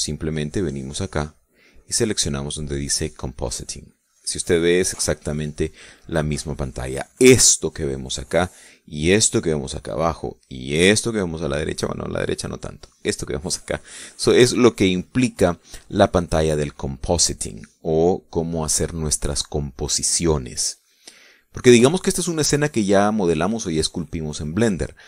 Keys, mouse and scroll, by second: 1.6 click, 3.7 click.